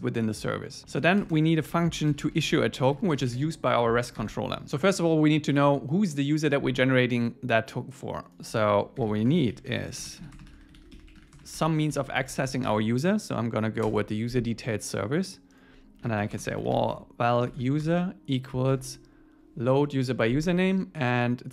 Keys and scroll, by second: 0.8 Up, 0.9 super+Right, 1.2 Return, 13.8 Return, 18.8 Tab, 19.8 Left.